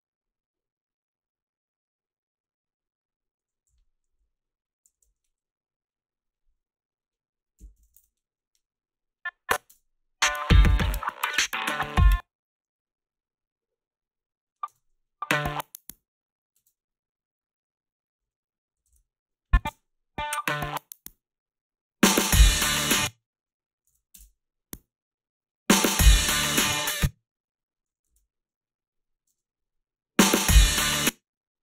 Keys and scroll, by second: 3.7 h, 4.1 a, 5.6-6.3 typing, 7.4-8.4 typing, 9.7 space, 11.9 space, 14.7 space, 16.6 space, 18.9 ctrl+b, 19.7 space, 22.7 space, 23.9 ctrl+b, 24.2 space, 26.7 space, 28.1 ctrl+b, 29.3 space, 30.8 space.